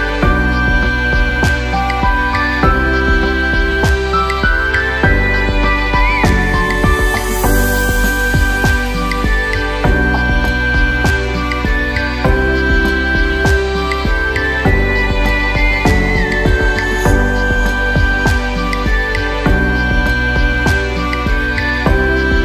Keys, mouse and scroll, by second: 0.0-1.7 drag, 3.0 click, 3.5 shift+click, 3.9 shift+click, 4.9-9.1 drag, 12.6-14.2 middle drag, 15.2 click, 16.6 click, 18.2 click, 22.2 click.